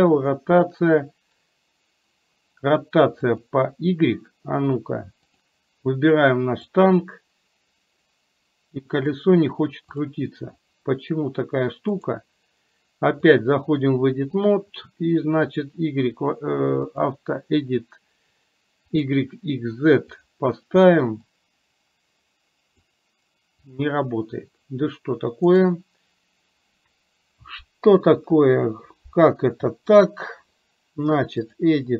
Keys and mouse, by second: 5.3 click, 7.1-9.3 drag, 10.1 click, 20.3 click, 21.6-23.1 drag, 23.7 click.